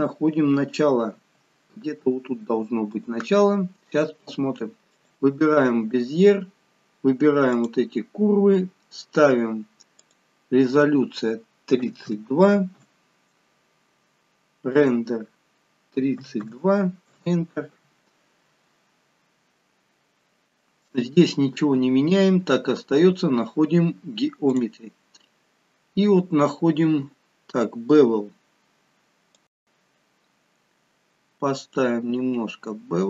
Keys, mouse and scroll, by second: 1.2 g, 4.9 click, 7.6 click, 10.1 click, 14.8 click, 19.3-22.4 scroll down 3, 22.5 scroll down 1, 24.5 click, 25.2-25.5 scroll down 2, 29.4 click.